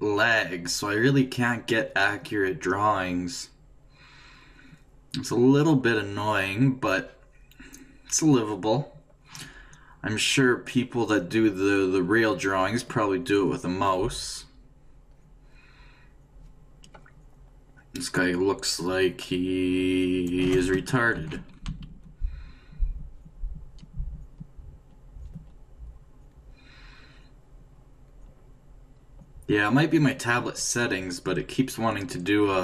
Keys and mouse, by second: 0.6-2.4 drag, 5.8 click, 12.2-14.2 drag, 16.5-17.8 d, 17.7-19.7 drag, 19.5-20.5 d, 21.2 ctrl+z, 21.7-32.6 d, 22.6-24.0 ctrl+drag.